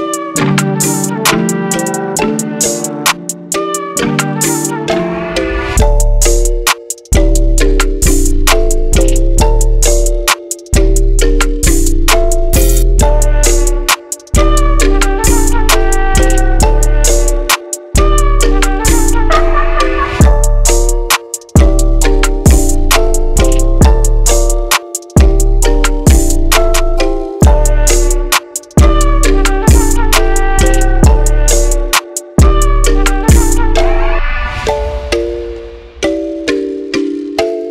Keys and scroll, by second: 35.0 typing.